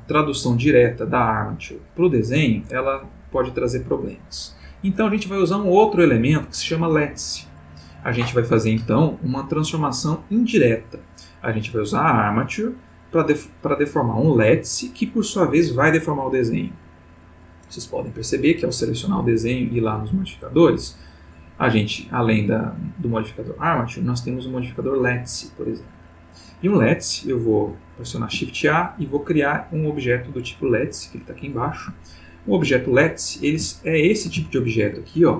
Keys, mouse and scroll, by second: 0.3 click, 1.9 click, 12.0 click, 17.9 click, 19.6 click, 21.2 click, 23.2 click, 28.1 shift+a, 30.8 click, 32.0-35.3 ctrl+middle drag.